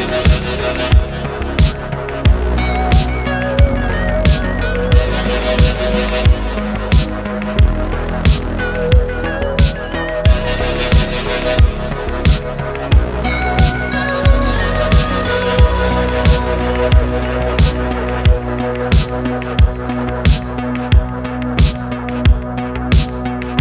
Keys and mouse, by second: 1.1 middle drag, 2.2 alt+p, 4.0 middle click, 4.7 click, 5.5-9.5 shift+drag, 9.9 click, 11.1 middle click, 12.2 alt+p, 15.2-15.9 middle drag, 16.4 shift+middle click, 18.1-19.2 middle drag, 20.2-21.8 middle drag, 22.0 shift+middle drag, 22.2 middle click, 22.5 shift+middle drag, 23.2 middle click.